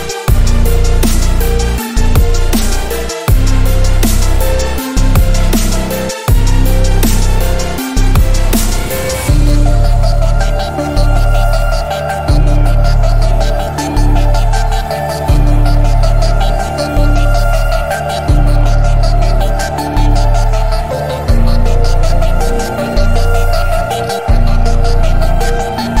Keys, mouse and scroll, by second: 1.3 alt+right click, 1.7 click, 2.7 ctrl+a, 3.3-3.6 alt+right click, 3.9 click, 6.5 alt+right click, 7.0-7.6 drag, 11.8 click, 13.0 alt+scroll up 1, 13.2 space, 13.2-13.5 drag, 18.3 space, 18.9 click, 21.7 ctrl+z, 22.9 click, 25.5 space, 25.8 click.